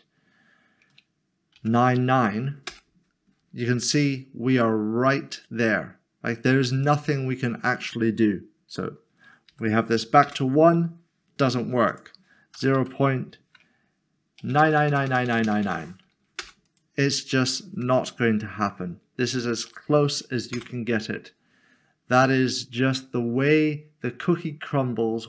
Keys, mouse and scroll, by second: 1.6 typing, 2.7 Return, 6.8 click, 9.9 typing, 10.2 Return, 11.9 click, 12.8 typing, 14.5-15.6 typing, 16.4 Return, 18.0 typing, 19.4-19.8 typing, 20.5 Return, 22.2 middle click.